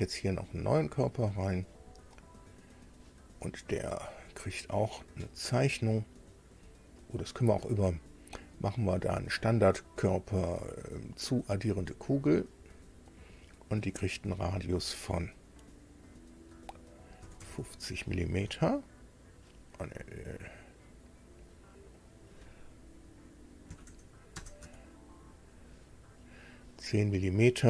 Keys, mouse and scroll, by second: 1.1 click, 2.5 click, 9.0 click, 11.5 click, 13.9 click, 17.2 KP_5, 17.4 KP_0, 18.5 Tab, 22.0 click, 23.7 KP_1, 24.3 KP_0, 24.6 Tab.